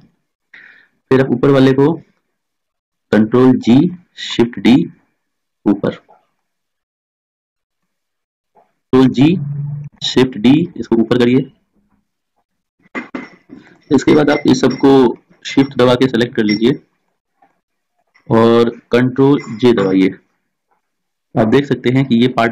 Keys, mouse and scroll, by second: 1.1-2.6 right drag, 3.5 ctrl+g, 4.4 shift+d, 9.1 ctrl+g, 10.0 shift+d, 14.4-15.6 right drag, 19.9 right click, 20.1 ctrl+j, 21.5-22.5 drag.